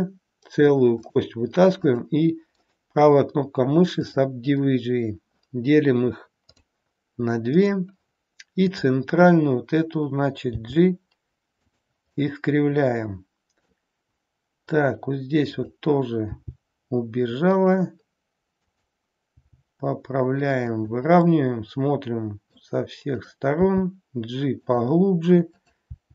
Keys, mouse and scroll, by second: 1.8 click, 2.7 right click, 6.4 click, 7.5 click, 10.5 g, 12.2 middle click, 16.3 g, 18.5 click, 19.3 g, 21.2 middle click, 23.2 click, 23.7 g, 25.4 click, 25.9 g.